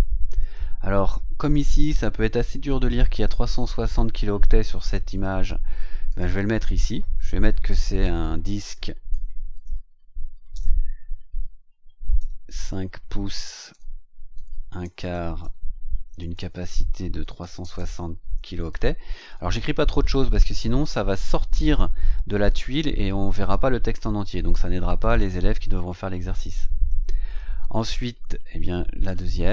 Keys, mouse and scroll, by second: 4.4-4.7 scroll down 2, 5.2-5.5 scroll down 2, 6.0 click, 8.8-10.5 typing, 12.1 KP_5, 13.6-18.6 typing, 16.2 KP_Subtract, 29.0 click.